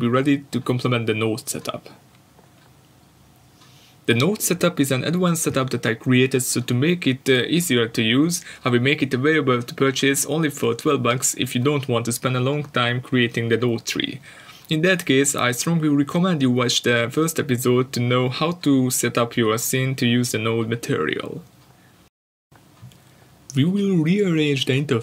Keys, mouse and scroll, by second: 12.0-12.7 scroll up 2, 12.7-14.6 scroll up 1, 14.6-16.0 scroll up 1, 16.0 click, 23.3-24.6 drag.